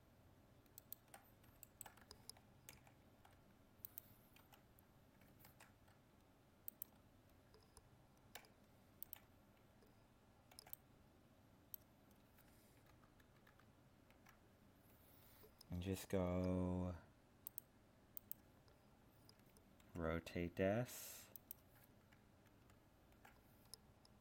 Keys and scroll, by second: 5.5 ctrl+Tab, 12.9 ctrl++, 22.6 ctrl+-.